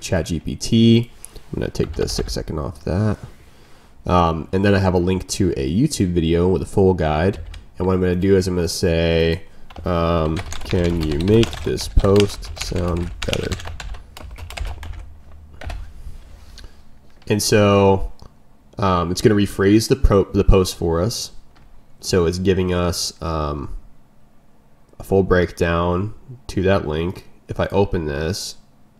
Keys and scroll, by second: 0.9 ctrl+m, 6.9 ctrl+m.